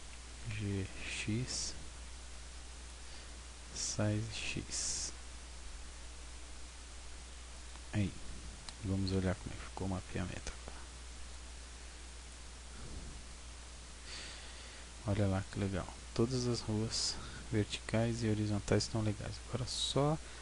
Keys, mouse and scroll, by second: 0.2 g, 3.0 click, 3.8 s, 7.4 click, 8.1-9.2 scroll down 1, 11.3 click, 12.8-13.4 scroll up 4, 13.4 Tab, 13.8-14.7 scroll up 3.